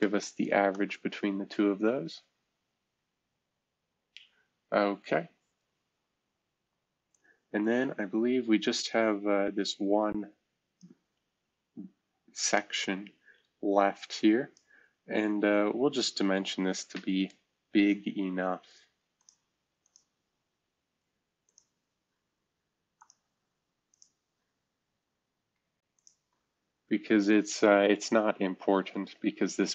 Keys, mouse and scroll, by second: 0.0-1.0 typing, 0.7 Return, 3.0-3.8 typing, 3.8-4.3 scroll down 1, 4.3-5.2 scroll up 1, 5.0-5.7 typing, 11.0-12.0 scroll down 1, 22.0-22.9 scroll down 2, 24.3-25.5 scroll down 1, 27.9 shift+v.